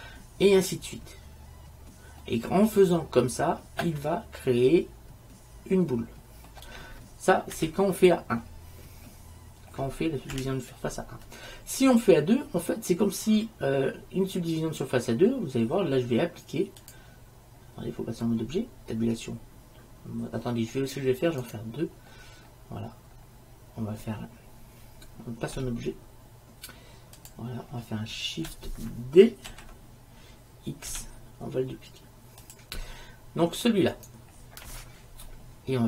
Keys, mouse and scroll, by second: 2.3-4.3 middle drag, 5.8 middle click, 7.7 KP_1, 8.2-9.3 middle drag, 10.4 KP_1, 16.9-18.7 drag, 19.2 Tab, 23.9-25.0 middle drag, 25.7 Tab, 29.6 shift+d, 34.0-35.7 right drag.